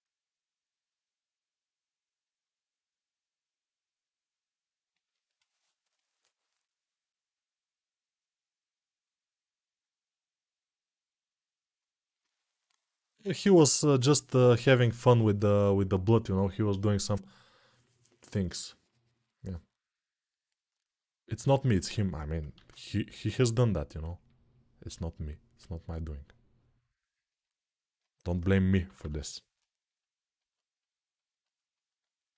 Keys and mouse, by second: 22.4 alt+q, 28.6 [.